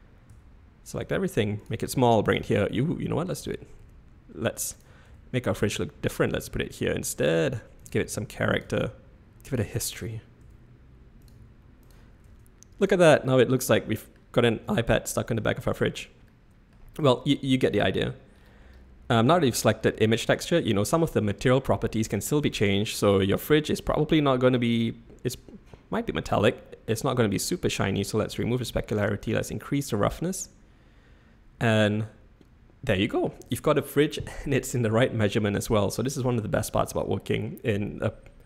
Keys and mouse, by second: 0.3-3.3 typing, 5.0 s, 5.7 g, 7.3 g, 7.9 s, 8.6 g, 10.4 s, 11.3 g, 12.3 Tab, 13.3-14.2 drag, 14.6-15.4 drag, 15.8 click, 16.4-16.9 middle drag, 19.9-21.2 middle drag, 23.4 middle drag, 25.4 click, 26.9-28.4 drag, 29.0-30.1 drag, 30.4-33.2 middle drag.